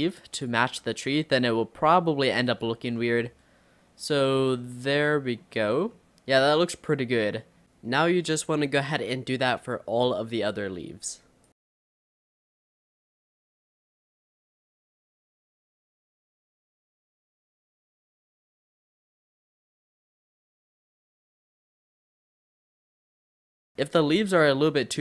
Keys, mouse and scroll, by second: 0.7 g, 2.8 Tab, 3.2-5.7 middle drag, 5.7 Tab, 6.0-8.0 middle drag, 8.0-10.3 typing, 8.1 scroll down 1, 8.1 middle click, 8.6 click, 9.4 click, 9.6 click, 9.7 scroll up 2, 10.4 middle click, 10.6 click, 10.7 middle click, 11.2 click, 11.4 middle click, 11.7 click, 11.9 middle click, 12.6 click, 13.0 click, 13.1 Tab, 13.1 middle drag, 13.4 click, 13.5 middle drag, 13.7 scroll down 5, 13.8-14.3 middle drag, 14.3-14.9 scroll up 4, 14.5 middle drag, 14.7 Tab, 14.9 scroll down 2, 15.1 middle click, 15.3 scroll up 3, 15.5 middle click, 15.8 click, 16.1-16.7 typing, 17.0 click, 17.5 middle click, 17.9 r, 18.5 middle click, 19.0 click, 19.1 s, 19.6 middle click, 20.4 r, 20.6 middle click, 20.8 click, 21.3 middle click, 21.7 click, 21.8 Tab, 21.8 click, 21.9 middle click, 22.3 Tab, 22.4 click, 22.6 l, 22.8 Tab, 22.9 middle click, 23.0-23.3 scroll down 2, 23.0 click, 23.1 middle click, 23.3 middle click, 23.9 Tab, 24.2-24.6 scroll up 4, 24.6-25.0 middle drag.